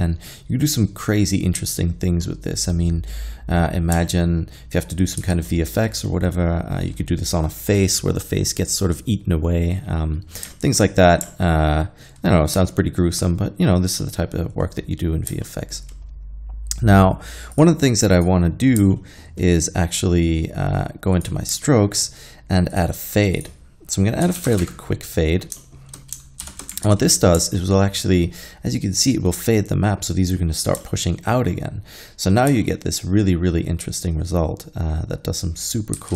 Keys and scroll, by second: 5.3 alt+a, 24.3 1, 24.5 5, 24.5 0, 24.6 Return, 26.5 shift+Left, 26.9 alt+a, 36.0 alt+a.